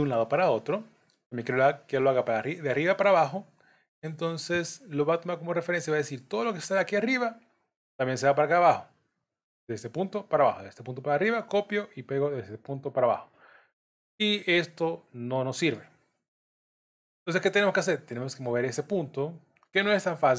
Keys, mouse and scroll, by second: 9.0 click, 12.7-13.4 scroll down 3, 13.1 middle click, 16.0-16.5 scroll up 2, 16.7 middle click, 16.7-17.4 scroll up 1.